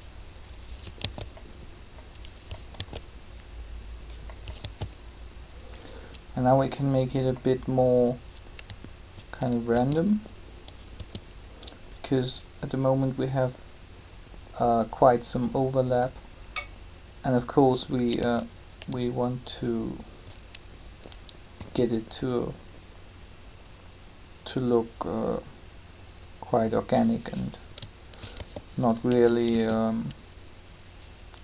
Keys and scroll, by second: 1.0 alt+a, 2.7 alt+a, 4.6 alt+a, 9.7 s, 21.5 s, 28.3 shift+g, 29.5 shift+d.